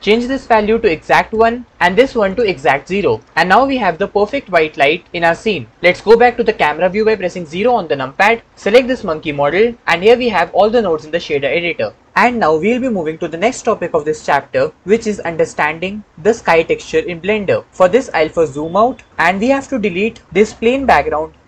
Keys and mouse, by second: 5.7 KP_0.